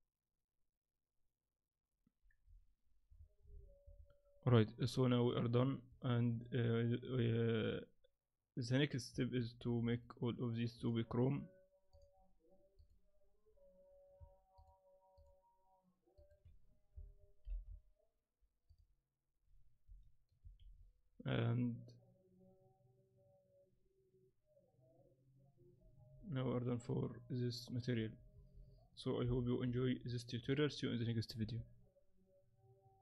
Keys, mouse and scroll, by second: 6.4 click, 9.2 z, 9.6 z, 9.9 right click, 10.7 click, 12.8 right click, 14.5 shift+right click, 17.4 ctrl+l, 20.6 shift+z, 28.0 z, 28.3 z, 29.2 KP_7, 29.7-30.2 scroll down 4, 30.0 scroll up 2, 31.0 scroll up 5.